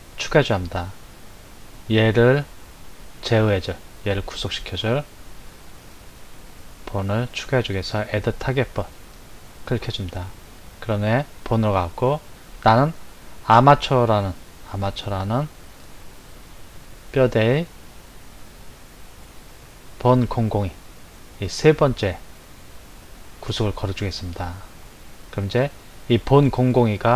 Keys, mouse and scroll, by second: 8.9-15.0 drag, 17.7-20.7 drag.